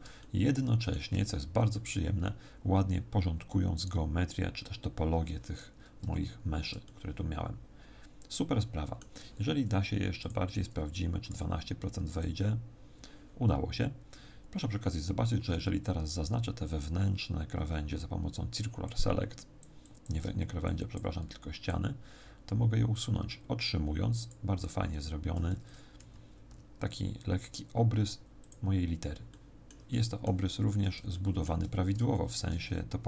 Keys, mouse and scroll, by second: 0.2 shift+middle click, 6.0-6.8 scroll down 1, 6.8 shift+middle click, 6.8-7.8 scroll down 3, 10.2 click, 16.0 c, 26.4 x, 29.3 middle click, 29.8 middle click, 30.4-31.1 scroll up 4, 31.1 shift+middle click, 32.3 ctrl+Tab.